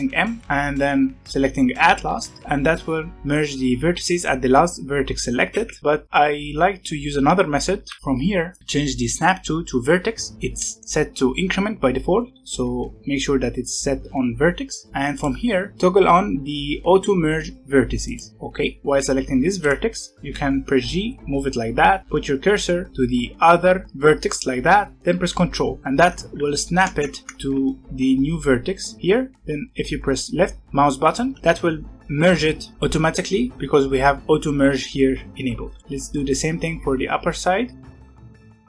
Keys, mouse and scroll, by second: 0.4 m, 5.7 ctrl+z, 7.7 alt+a, 8.0 ctrl+z, 8.4-10.3 drag, 15.1 click, 18.0 click, 18.8 g, 20.1 g, 35.7 shift+middle click, 35.8 g, 37.8 g.